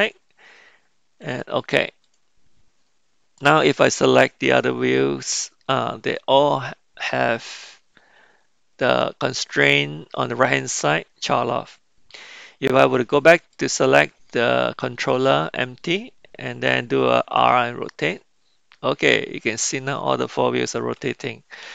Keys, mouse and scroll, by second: 3.7 click, 6.0 click, 8.9 click, 13.3 click, 17.4 r.